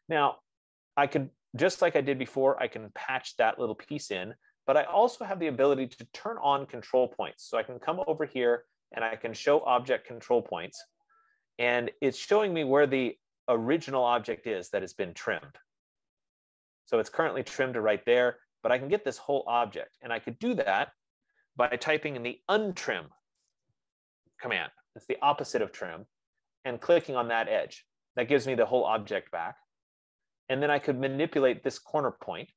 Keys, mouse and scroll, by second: 0.4 click, 3.9 click, 10.1 click, 18.7 F15, 22.9-24.6 typing, 24.6 Return, 27.6 click, 29.2 typing, 31.4 click.